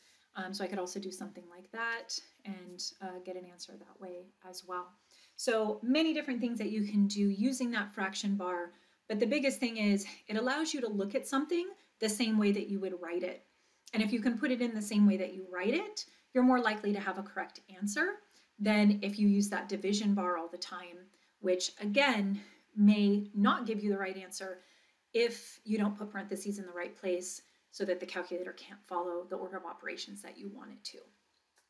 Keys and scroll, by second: 1.9 Return.